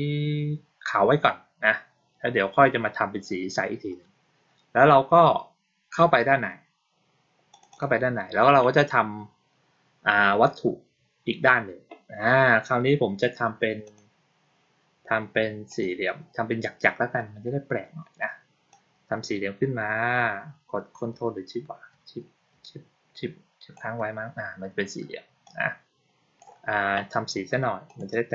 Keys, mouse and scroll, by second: 7.4 click, 7.6 click, 13.7 click, 15.6 click, 18.6-23.6 drag, 25.3-26.3 drag, 27.7 click.